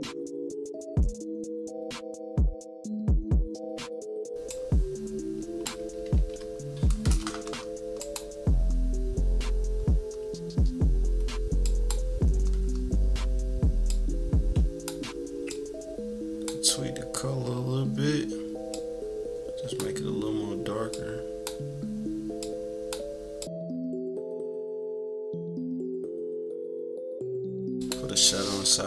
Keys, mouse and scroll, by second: 0.0 scroll up 1, 0.1 =, 0.3 click, 0.9 -, 1.1 scroll down 1, 1.1 =, 1.1 click, 2.2 scroll down 2, 2.2 =, 2.4-3.7 drag, 3.8 -, 3.8 =, 4.0 scroll up 1, 4.0 -, 4.5-5.7 drag, 5.9 =, 6.1 =, 7.9-12.0 drag, 13.9 click, 15.5 click, 18.7 click, 20.9 click, 22.4 click, 23.4 click, 24.1 click, 24.6 click, 24.9 click, 25.0 -, 25.2 scroll up 2, 25.4 =, 26.2 =, 26.2 scroll up 2, 26.4 scroll down 4, 26.5-26.9 scroll up 3, 26.5 =, 27.0 click, 27.4 click, 27.7 click.